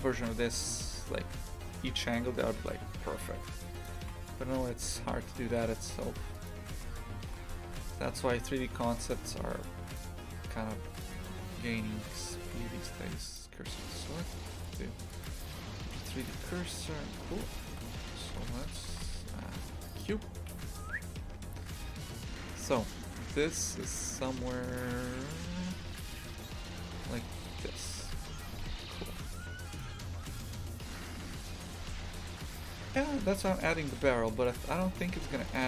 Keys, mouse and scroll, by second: 0.1 shift+f, 4.0 shift+f, 6.7 shift+f, 11.0 click, 11.1 right click, 13.3 shift+s, 16.2-20.0 drag, 20.0 shift+a, 20.5 s, 33.1 g, 34.9 shift+f.